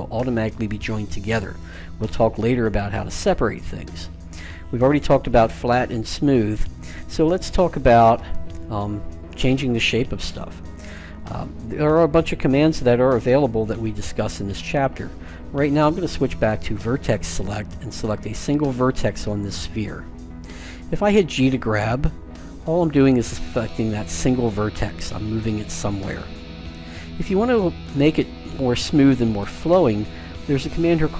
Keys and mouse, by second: 16.6-18.5 drag, 18.6 right click, 19.0-20.3 middle drag, 21.3 g.